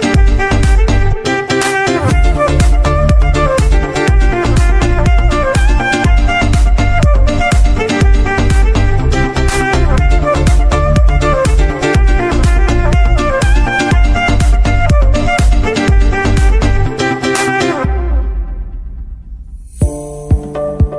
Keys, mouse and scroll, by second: 2.1 KP_Enter, 4.0-4.5 scroll down 2, 4.5-4.9 middle drag, 4.9 ctrl+s, 5.8 shift+Left, 6.9 scroll down 1, 8.8-9.2 drag, 9.2-9.9 scroll down 1, 13.2-20.9 drag.